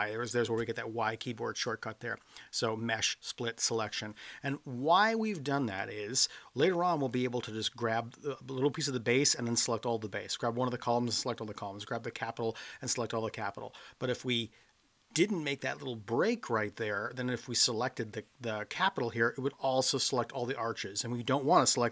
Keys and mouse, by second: 5.7 click.